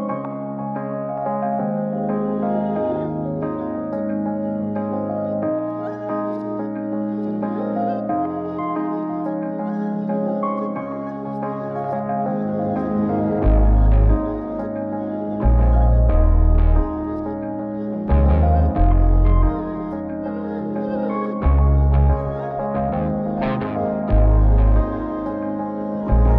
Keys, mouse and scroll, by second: 2.0 click, 2.3 click, 3.2 click, 4.0 click, 4.4 click, 5.0 click, 6.2 click, 8.5 click, 10.4 click, 12.1-12.9 drag, 14.8 scroll down 1, 15.0 middle click, 15.8 scroll up 2, 16.5-17.2 scroll down 2, 17.2 scroll up 2, 18.2 ctrl+shift+click, 20.8-21.3 scroll down 2, 21.9 ctrl+shift+click, 23.1 ctrl+shift+click, 23.4 ctrl+shift+click, 23.8 ctrl+shift+click, 24.0 ctrl+shift+click, 24.3 ctrl+shift+click, 24.6 ctrl+shift+click, 24.9 ctrl+shift+click, 25.3 ctrl+shift+click, 26.1-26.3 scroll up 3.